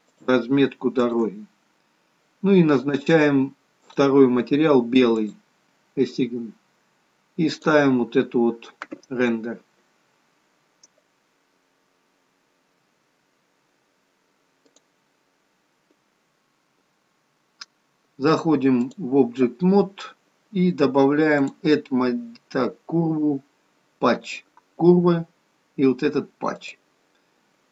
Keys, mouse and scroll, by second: 0.9 shift+click, 1.7-3.8 scroll down 1, 3.8 click, 3.8 scroll down 2, 5.2 click, 9.6 click, 16.6 click, 21.4 click.